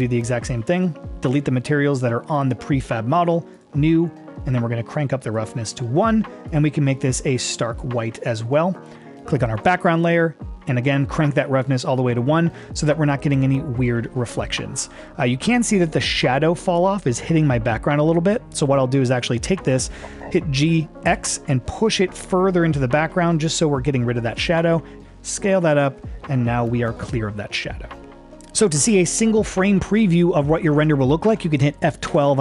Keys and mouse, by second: 1.4 click, 2.4 click, 3.6 click, 5.5 click, 6.5 click, 9.6 click, 11.6-15.0 drag, 20.6 g, 21.1 x, 25.0 s.